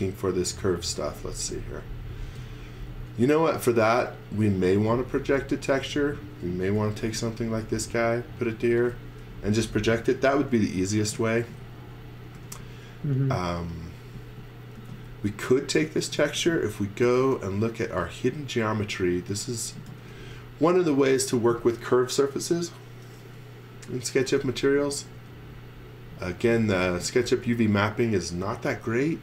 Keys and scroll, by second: 1.0 x, 2.3 space, 2.9 x, 3.2 v, 3.9 x, 5.3 v, 6.8 m, 8.5-10.1 typing, 11.1-15.3 typing, 17.0 shift+1, 17.8 space, 19.3-20.6 typing, 23.9-25.1 typing.